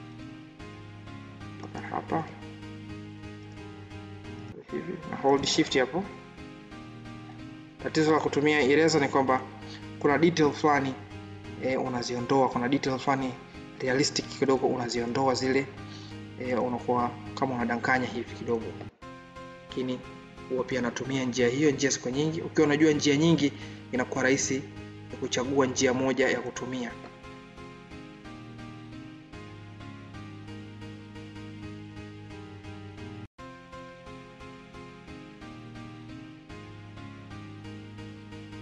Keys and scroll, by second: 2.7 ctrl+z, 5.7 ctrl+z, 20.6 ctrl+z, 23.1 ctrl+d, 26.3 ctrl+z.